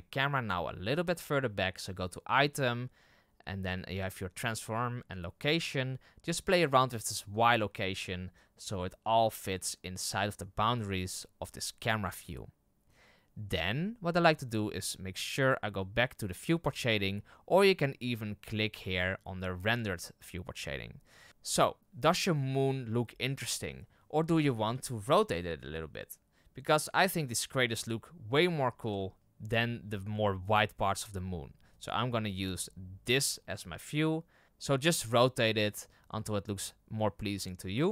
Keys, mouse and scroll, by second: 7.4-11.0 drag, 16.7-19.8 drag, 21.3 right click, 24.5 r, 28.8 r.